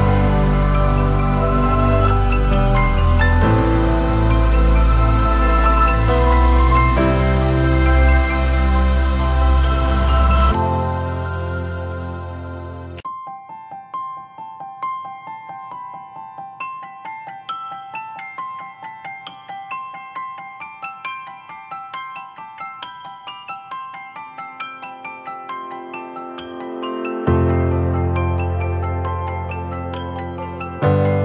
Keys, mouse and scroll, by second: 18.1 alt+click.